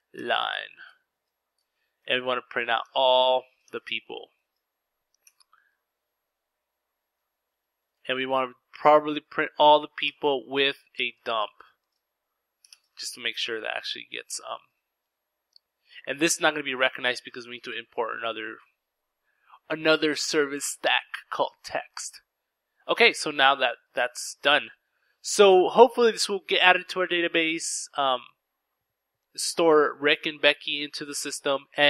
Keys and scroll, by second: 0.9-4.2 typing, 2.0 Return, 5.5 ctrl+s, 6.1 Left, 6.3 Left, 8.3-11.1 typing, 13.6 ctrl+s, 15.7 typing, 23.2 ctrl+s, 23.2 typing.